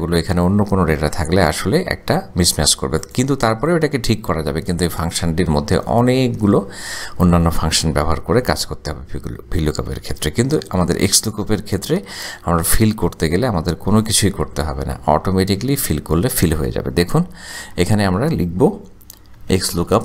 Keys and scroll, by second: 18.0 =, 19.4-20.0 typing.